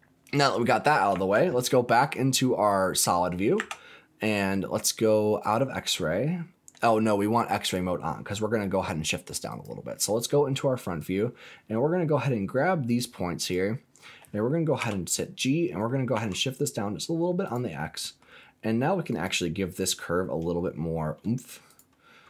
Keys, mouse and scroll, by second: 1.1 Tab, 2.7 click, 3.5 Tab, 4.2 click, 5.3 click, 5.9 middle click, 7.5 click, 9.4 click, 10.9-13.5 drag, 14.7 g, 16.1 z, 17.4 click, 17.7 middle click, 19.0 click, 20.7 space, 21.6 click.